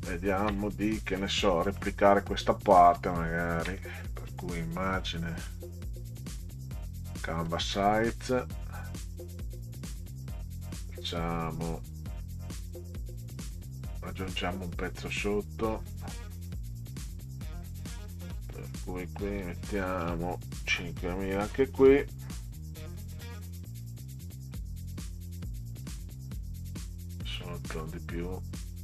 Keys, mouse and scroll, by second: 1.4 middle click, 3.4 ctrl+scroll down 2, 4.7 click, 7.4 click, 19.2 click, 21.5 5, 22.8 ì, 23.0 ì, 23.2 ì, 24.3 click, 25.8 click, 26.4 click.